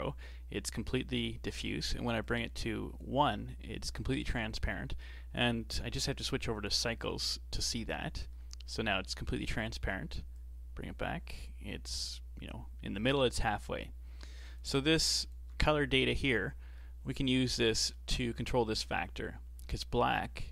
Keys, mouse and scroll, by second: 2.2-4.7 drag, 4.7-5.7 middle drag, 5.7-8.3 drag, 8.3-10.4 middle drag, 10.4-13.4 drag, 15.3 ctrl+shift+click, 16.8-20.5 middle drag.